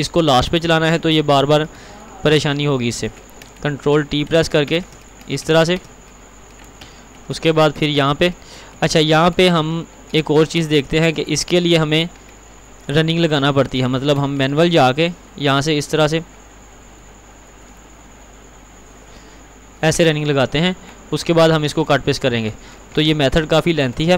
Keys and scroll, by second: 3.9 ctrl+t, 5.3 ctrl+x, 5.5 ctrl+r, 6.9 ctrl+t, 11.6 ctrl+t, 21.6 ctrl+®.